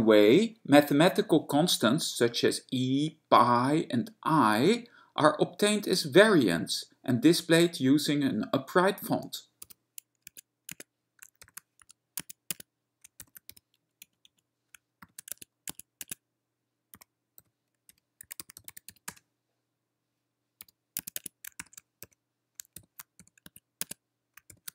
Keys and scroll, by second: 9.9 e, 10.4 Tab, 10.9 Tab, 11.7 ^, 12.1 e, 12.3 Tab, 12.7 Tab, 13.5 ^, 13.8 x, 14.2 Right, 14.4 Right, 15.3 >, 15.5 Tab, 15.8 Tab, 16.2 Tab, 17.2-23.5 typing, 21.1 Tab, 21.3 Tab, 23.6 Tab, 24.0 Tab.